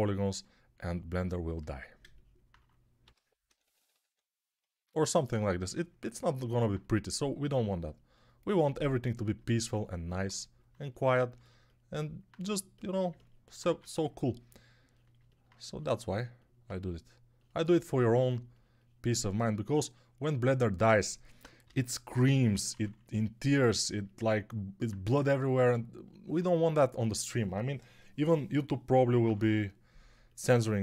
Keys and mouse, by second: 2.9-3.9 typing, 13.5 1, 21.5-22.6 typing, 28.9 [, 29.1 [, 29.3 [.